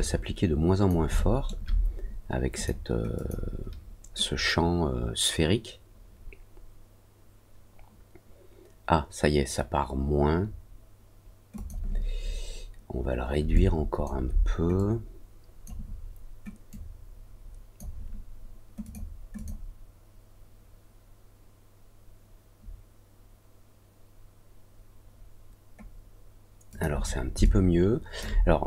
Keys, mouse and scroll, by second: 1.1 alt+middle click, 2.5 click, 3.1 click, 11.5 click, 13.5 alt+click, 14.7 click, 16.6-17.7 drag, 18.8 click, 19.3 click, 26.6 click, 27.4 alt+click, 28.5 scroll down 1.